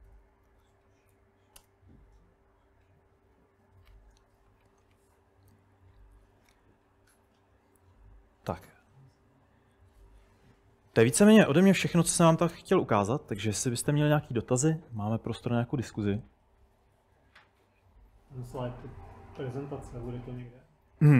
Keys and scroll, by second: 0.5 super+Tab, 1.1 Up, 1.6 Return, 5.6-6.2 typing, 7.6-13.6 typing, 12.5 Return.